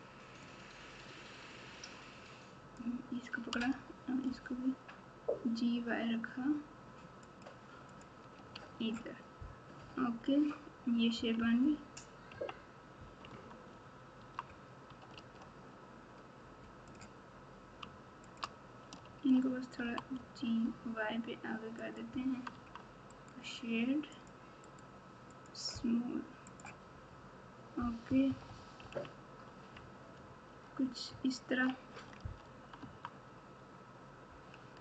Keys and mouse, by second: 0.4-2.7 drag, 3.6 g, 8.5 alt+z, 9.7 KP_1, 11.1 KP_6, 11.3 KP_6, 12.3 KP_6, 12.3 KP_4, 13.7 Tab, 14.2 Tab, 15.1 alt+z, 16.9 click, 18.2 shift+click, 19.1 alt+z, 19.8 g, 22.5 Tab, 23.1-24.3 right drag, 24.6-26.6 right drag, 28.0 KP_4, 28.2 KP_4, 28.8 KP_1, 31.1 ctrl+KP_6, 32.8 Tab.